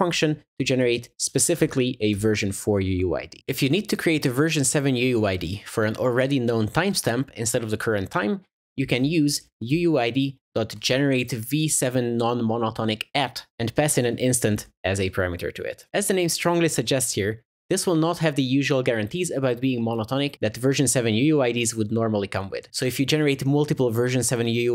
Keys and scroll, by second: 2.2 Return, 13.5 Return.